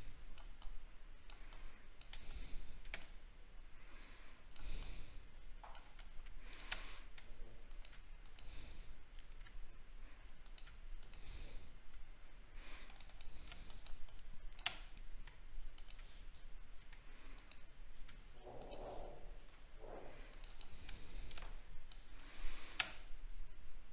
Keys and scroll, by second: 2.4 alt+scroll down 2, 20.9 alt+scroll down 1, 23.0 alt+scroll up 7.